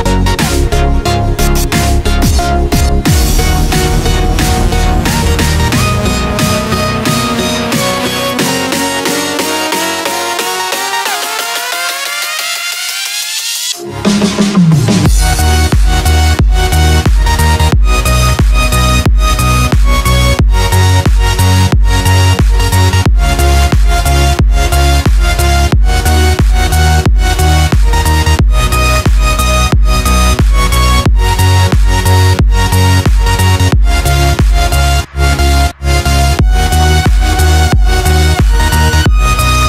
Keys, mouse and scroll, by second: 1.5 alt+scroll down 1, 3.3 alt+scroll up 1, 4.4 click, 6.6 ctrl+s, 8.0 click, 14.0 click, 19.6 ctrl+s, 21.2 click, 25.1-25.9 scroll down 1, 25.9 click, 26.8 ctrl+s, 28.0 click, 31.8-32.9 scroll down 1, 32.9 click, 34.5 ctrl+s, 35.6 click.